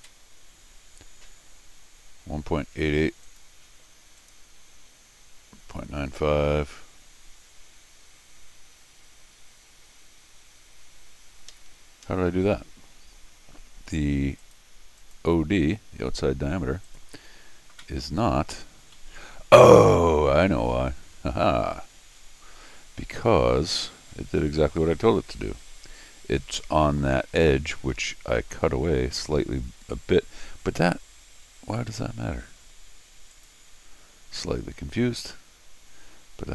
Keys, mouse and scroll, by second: 3.2 click, 4.2 click, 11.5 Escape, 11.7 Escape, 12.0 Escape, 14.4 click, 15.0 click, 16.8 click, 18.7 scroll down 1, 18.9 middle click, 20.1-20.7 scroll down 3, 22.2-22.7 scroll down 6, 23.4-24.1 scroll up 2, 24.4 middle click, 25.3 scroll up 1, 28.1 middle click, 29.2-30.0 scroll up 1, 32.3 scroll down 2, 33.3 click.